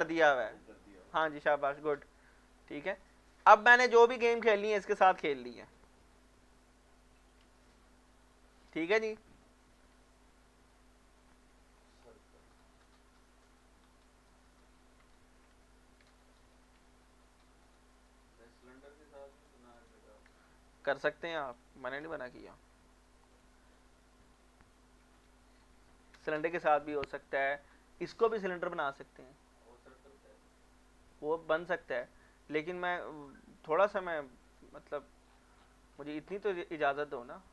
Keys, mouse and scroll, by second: 1.6 Tab, 2.6 middle click, 2.9 scroll up 1, 3.4 middle click, 4.1-4.5 scroll up 3, 4.8 shift+middle click, 8.2 click, 10.2 shift+middle click, 10.4 scroll up 1, 10.8 shift+middle click, 11.9 ctrl+r, 14.3 scroll up 1, 15.0 Escape, 16.3 ctrl+r, 18.3-19.2 scroll up 1, 19.3 click, 19.7 right click, 20.4 shift+middle click, 21.2-22.5 typing, 23.3 click, 24.3 alt+click, 24.8-26.4 typing, 32.9 alt+Num_Lock, 33.1 alt+click, 34.9 scroll down 1, 35.8 scroll down 1, 36.1-36.6 scroll up 2.